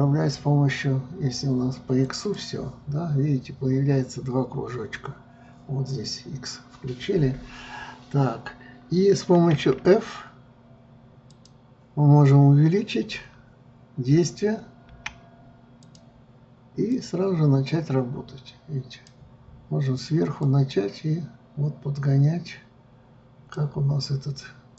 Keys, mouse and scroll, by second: 2.2 click, 17.1-20.2 drag, 20.6-23.7 drag.